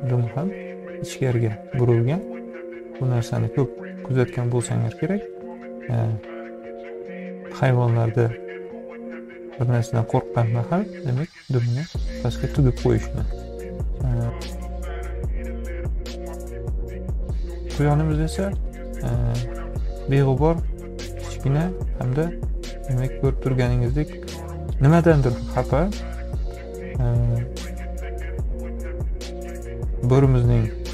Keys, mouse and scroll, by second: 6.1 click, 19.7-21.2 drag, 24.5-26.4 drag.